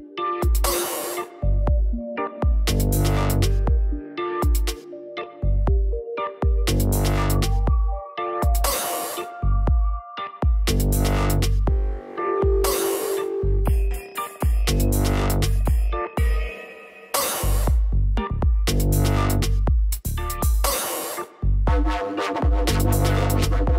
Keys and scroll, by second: 18.5 ctrl+0.